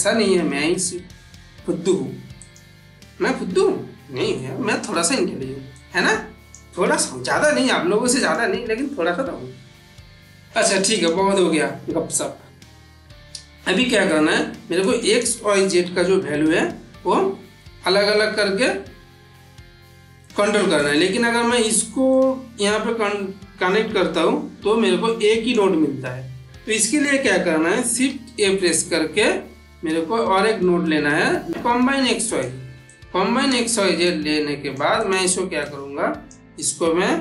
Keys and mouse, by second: 2.2 click, 4.2-5.1 middle drag, 5.7-6.5 click, 6.8 g, 8.1 click, 10.8 click, 13.9 middle click, 14.7-15.3 drag, 20.1-20.9 ctrl+middle click, 22.0-25.4 drag, 27.9 shift+a, 31.5 click, 32.1-33.7 drag.